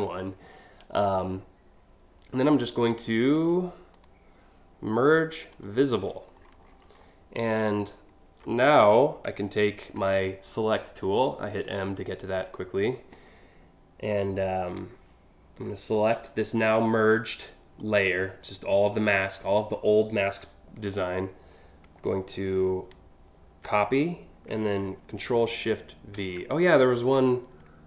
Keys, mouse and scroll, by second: 2.0 right click, 2.9 click, 3.6 right click, 5.2 click, 5.9 scroll down 1, 6.3-6.7 scroll up 3, 7.2 alt+scroll down 1, 7.7 alt+scroll up 1, 9.6 m, 13.7-17.4 drag, 23.3 ctrl+c, 25.8 ctrl+shift+v.